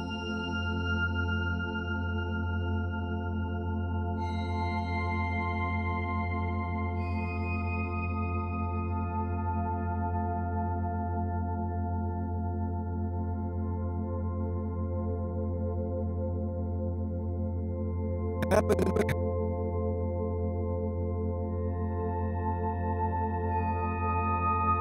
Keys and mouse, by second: 1.3 ctrl+alt+click, 4.0 alt+click, 4.7 click, 5.5 click, 7.4 alt+click, 8.6 click, 8.9 click, 10.6 click, 11.5 alt+click, 12.5 click, 13.6 click, 14.2 click, 14.5-16.1 drag, 16.4-18.5 drag, 18.6-20.1 drag, 23.1 click, 24.6 click.